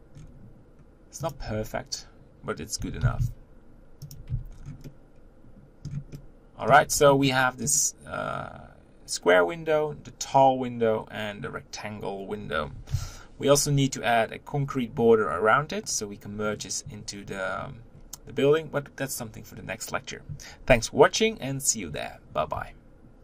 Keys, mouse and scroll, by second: 0.2-1.3 scroll down 4, 1.3 click, 1.5 Tab, 2.8 g, 4.3 Tab, 4.5-4.8 scroll down 4, 4.8-5.9 middle drag, 5.9 scroll up 1, 6.1-6.9 middle drag, 6.9-7.3 scroll down 3, 7.3-12.9 middle drag, 12.9 KP_1.